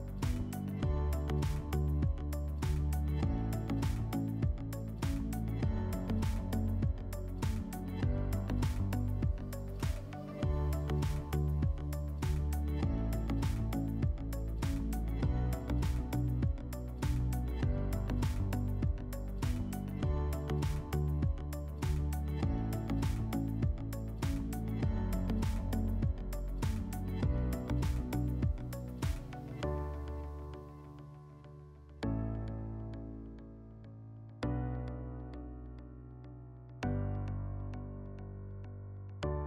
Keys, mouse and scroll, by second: 2.8 click, 4.7 click, 5.9 click, 7.0 click, 12.0 click, 13.4 click, 15.6 click, 18.4 click, 22.9 click, 23.7 click, 25.3 click, 28.8 click, 30.7-32.0 drag.